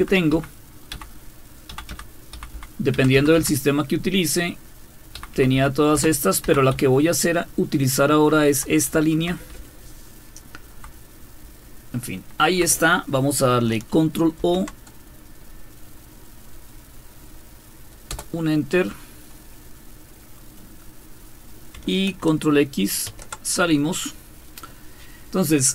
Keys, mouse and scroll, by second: 0.3 Up, 0.9 Down, 1.7 Down, 1.9 Down, 2.3 Up, 2.5 Up, 2.9 Down, 3.1 Down, 3.4 typing, 5.2-6.4 typing, 6.7-8.9 Left, 8.9 Right, 9.6-10.5 Down, 10.1-10.8 typing, 14.4 ctrl+o, 18.1 Return, 23.1 ctrl+x.